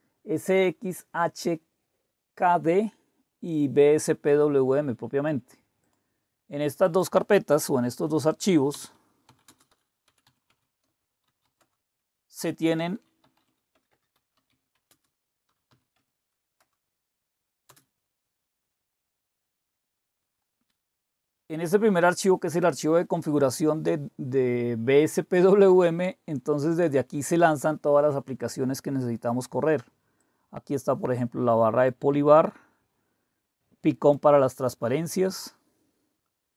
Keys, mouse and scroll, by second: 4.3-5.3 drag, 5.8 click, 6.8 click, 9.0-11.9 typing, 13.0-16.6 typing, 18.9-20.3 scroll up 1, 20.3-21.1 scroll up 1, 21.1-23.3 scroll down 1, 23.3-25.9 scroll down 1, 25.9-30.2 scroll down 1, 30.2-31.9 drag, 33.6 click, 34.9-35.9 scroll down 2.